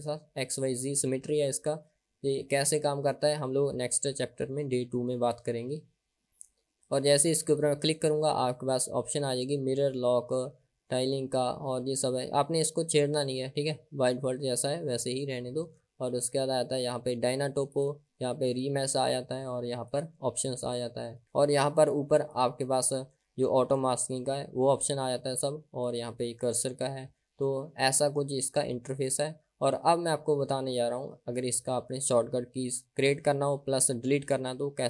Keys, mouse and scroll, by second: 7.5-15.8 drag, 16.9 click, 18.6 click, 20.0 click, 22.5-25.3 drag, 26.0-27.0 drag.